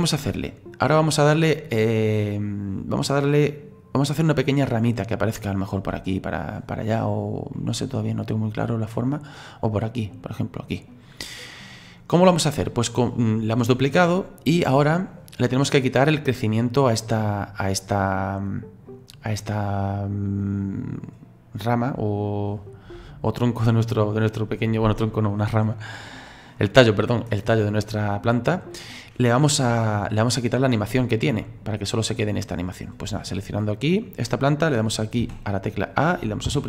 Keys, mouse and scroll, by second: 4.0-8.3 middle drag, 8.3-8.6 scroll up 2, 8.6-11.4 middle drag, 11.4-14.4 scroll down 2, 17.1 right click, 18.5 right click, 20.4-23.4 drag, 25.5-28.6 drag, 35.2 a, 36.5 Delete.